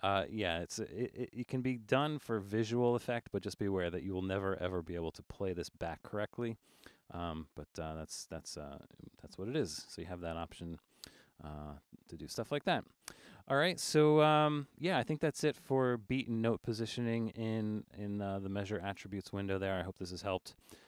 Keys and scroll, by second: 9.7 super+-, 10.2 super+-, 10.7 super+-.